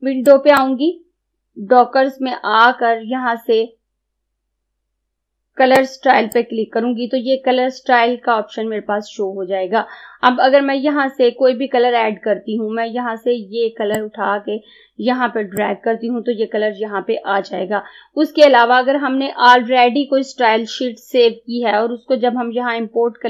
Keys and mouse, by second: 0.4 click, 5.9-8.7 drag, 14.0-23.2 drag.